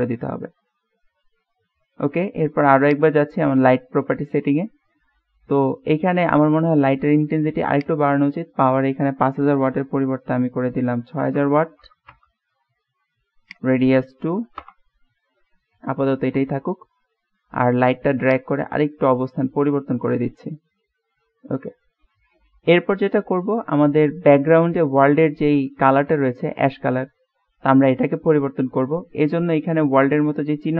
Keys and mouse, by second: 4.6-6.8 middle drag, 7.9-12.6 drag, 11.6 KP_0, 13.5-15.5 drag, 16.0 middle click, 17.2-17.6 middle drag, 18.4-19.7 drag, 20.1-23.0 middle drag, 23.8-26.5 middle drag.